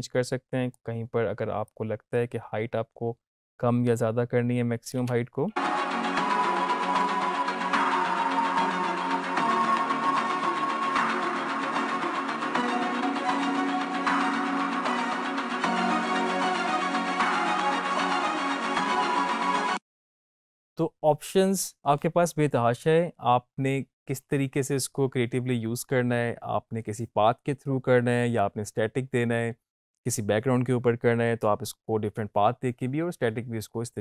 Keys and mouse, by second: 5.1 space, 19.3 space.